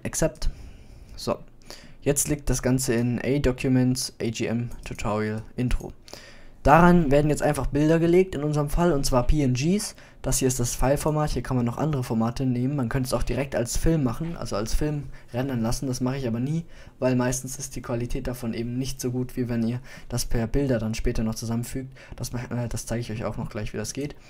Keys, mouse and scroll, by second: 1.9-3.5 middle drag, 3.5 scroll down 1, 10.5-12.4 middle drag, 12.4-12.8 scroll down 1, 23.4-24.2 drag.